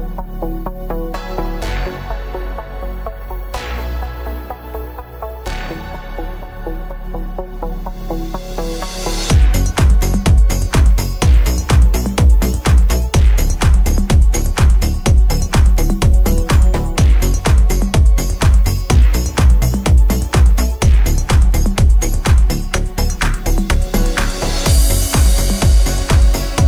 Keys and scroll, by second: 13.9 Escape, 25.7 Escape.